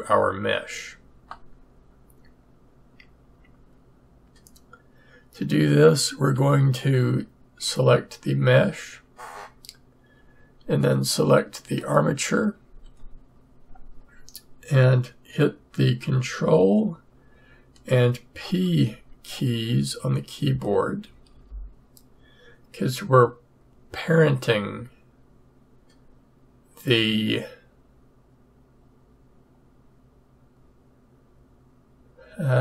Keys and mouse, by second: 21.1 ctrl+p, 24.6-32.6 right drag.